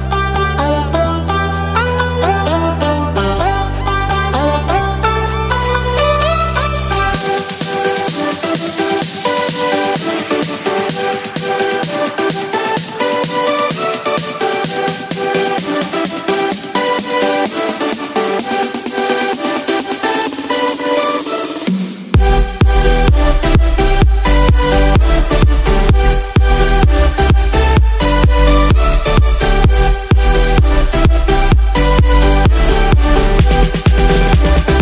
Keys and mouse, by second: 0.3 click, 0.7 click, 3.3 click, 3.9 click, 4.5-7.7 drag, 7.9 click, 9.1 click, 9.9 click, 10.9 KP_0, 11.1 click, 12.1 middle click, 13.3 middle click, 17.1-19.9 drag, 20.1-22.0 drag, 25.8 click, 27.9 click, 28.1-29.6 middle drag, 32.1 click.